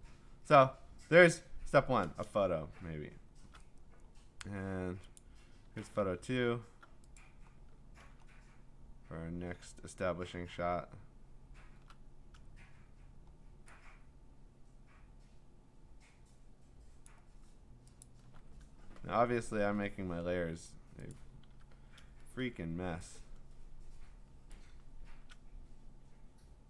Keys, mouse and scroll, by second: 2.8 ctrl+scroll, 4.0-5.2 scroll, 5.2 click, 7.2 click, 7.5-9.2 scroll, 9.2-10.7 scroll, 10.7 scroll, 11.2 scroll down 4, 11.3-11.8 scroll down 5, 12.5-13.6 scroll up 3, 16.0 scroll, 17.1 click, 18.0 alt+click, 18.7-19.6 scroll, 21.1 click, 21.4 ctrl+t.